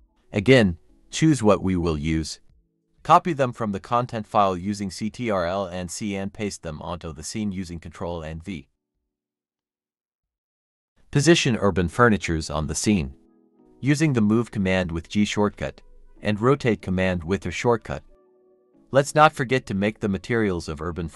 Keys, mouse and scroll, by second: 0.2-0.6 scroll up 1, 1.4 shift+click, 2.5 shift+click, 3.2 ctrl+c, 4.9 ctrl+v, 6.5-7.2 typing, 7.0 Escape, 8.7-11.7 typing, 11.4-11.7 scroll up 1, 12.0 shift+click, 12.1-12.6 scroll down 1, 12.7 ctrl+j, 14.0 typing, 15.3 double click, 16.3-18.8 typing, 18.6 scroll down 1, 19.7 scroll up 1, 19.9-21.1 typing.